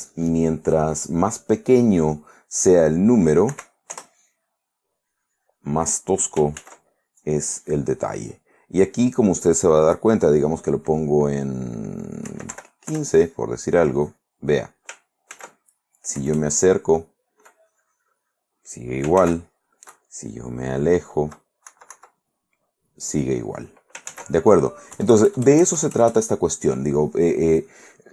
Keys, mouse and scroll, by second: 1.9 click, 3.7 4, 4.1 Return, 5.0-6.2 drag, 6.8 ctrl+z, 9.8 click, 12.4 1, 12.7 5, 13.1 Return, 13.9 click, 15.5 ctrl+z, 16.3 KP_Add, 17.7 click, 19.4 ctrl+z, 20.1 KP_Subtract, 22.5 click, 24.3 ctrl+z, 25.1 KP_Add, 26.6 middle click.